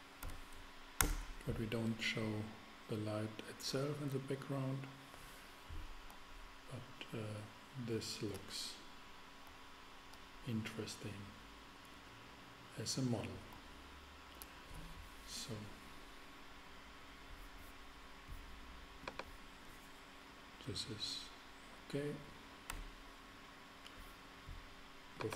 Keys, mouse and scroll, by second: 0.2 3, 1.0 Return, 21.0-22.7 middle drag, 22.7 KP_0, 22.8 KP_0.